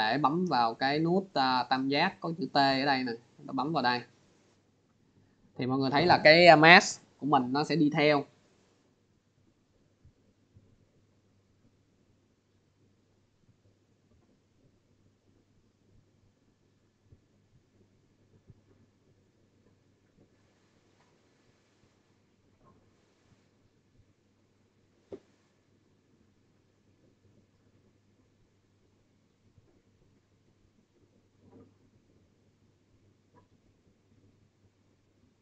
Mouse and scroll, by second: 3.5 click.